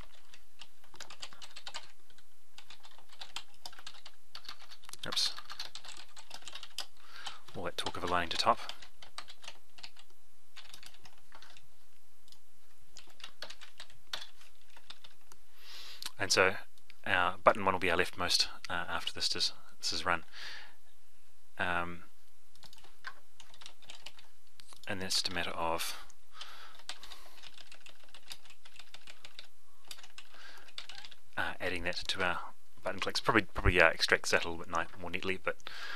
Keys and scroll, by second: 9.8 ctrl+c, 10.5 ctrl+v, 24.0 ctrl+c, 25.8 ctrl+v, 27.1 ctrl+c, 28.2 ctrl+v, 28.8 ctrl+v, 30.0 ctrl+v.